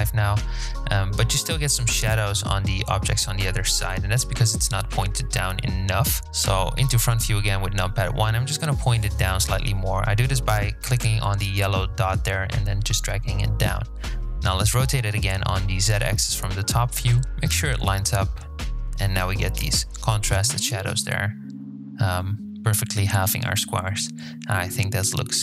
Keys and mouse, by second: 4.3 KP_1, 6.8 click, 7.4-8.7 drag, 9.3 KP_7, 11.9 r, 20.8 click, 23.7 click.